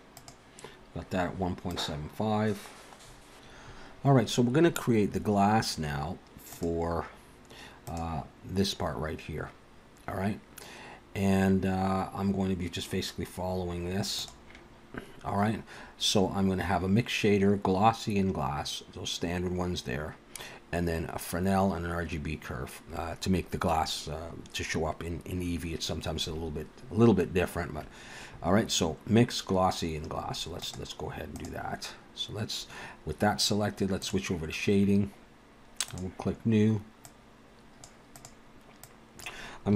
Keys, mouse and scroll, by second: 0.2 click, 1.8 click, 2.2 scroll down 3, 3.1 scroll up 3.